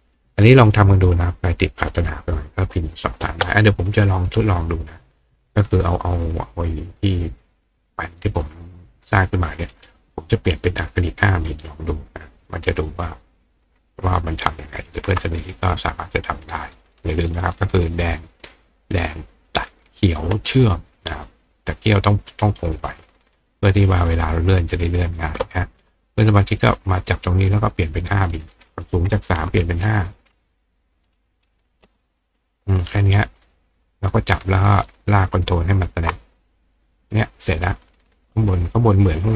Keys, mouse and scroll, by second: 4.9 click, 5.5 click, 6.8 click, 7.5 click, 9.7 right click, 10.0-10.3 scroll up 1, 11.0 click, 12.4 click, 13.7-14.9 ctrl+drag, 14.8 ctrl+right click, 16.1 click, 16.6 right click, 17.9 click, 21.1 click, 22.0 click, 24.0 click, 24.8 click, 26.1 click, 26.6 click, 28.3 click, 30.8 click, 32.3 click, 33.4 click, 34.8 ctrl+click, 36.0 ctrl+click, 36.8 click, 37.1 right click, 38.5 click.